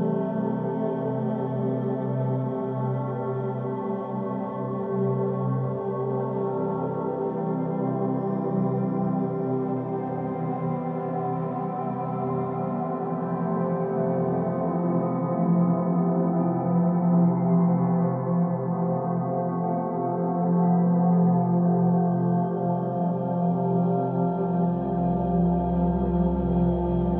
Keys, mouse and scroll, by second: 1.3-2.4 scroll up 1, 2.4-5.4 middle drag, 8.2 click, 11.8-13.1 middle drag, 13.1-13.6 scroll down 1, 13.6-16.6 middle drag, 23.0 click, 24.6-27.1 drag.